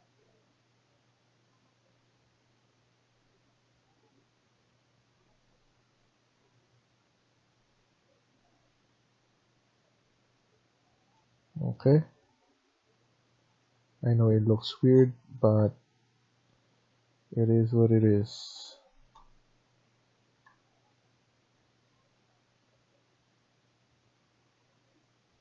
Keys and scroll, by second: 14.5 Escape, 17.9 Tab, 18.4 Tab, 18.8 Escape.